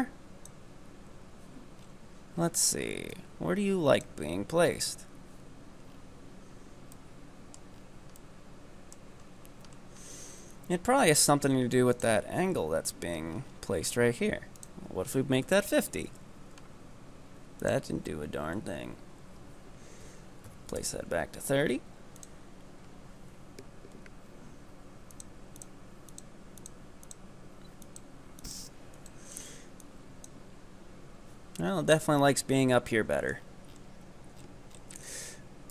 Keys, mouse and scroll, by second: 1.9-3.2 scroll up 5, 3.2-4.0 drag, 5.9-7.0 scroll down 5, 7.0-7.8 middle drag, 7.8-8.2 scroll up 5, 8.2-9.2 middle drag, 9.2-10.9 scroll up 7, 11.9 click, 13.3 scroll up 3, 13.5-14.6 scroll down 9, 14.6-20.7 drag, 22.2 click, 25.2 click, 25.6 click, 26.1 click, 26.6 click, 27.0 click, 27.8 click, 28.4 click, 29.0 click, 29.8-30.3 drag, 32.1-32.9 scroll down 5, 32.9-33.4 middle drag, 33.4-34.4 scroll down 11, 34.4-35.3 scroll up 11, 35.3-35.7 scroll up 1.